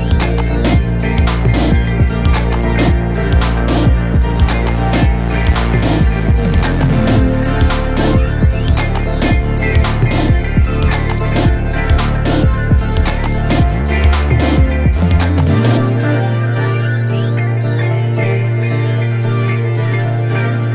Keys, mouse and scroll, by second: 1.1 click, 1.3 Tab, 1.4 shift+middle click, 1.6 a, 1.6 drag, 1.7-3.2 shift+middle drag, 3.2 drag, 4.7 click, 4.9 scroll down 1, 4.9 middle drag, 5.1 a, 5.2 click, 5.3-5.8 middle drag, 5.8 scroll up 1, 5.9 shift+middle drag, 6.0 scroll down 1, 6.1-6.9 middle drag, 6.9-9.2 drag, 9.3 scroll up 2, 9.4 middle drag, 9.6 drag, 9.9 shift+middle click, 10.0-10.9 drag, 10.9 shift+middle drag, 11.1 drag, 11.4 scroll down 2, 11.4 shift+middle click, 11.5 scroll up 1, 11.7-12.1 shift+middle drag, 12.1 scroll up 1, 12.2 shift+middle click, 12.3 f, 12.4 scroll down 2, 12.5 scroll up 1, 12.8-13.3 middle drag, 13.3 scroll up 1, 13.4-13.7 shift+middle drag, 13.7-14.4 drag, 15.8-16.2 drag, 16.2 shift+middle drag, 16.4-16.7 scroll up 1, 16.7-17.4 drag, 17.8-18.5 drag, 18.6 shift+middle drag, 18.9-19.3 scroll down 2, 19.3 shift+middle click, 19.6-20.0 scroll up 3, 19.6 shift+middle drag, 20.0-20.7 drag.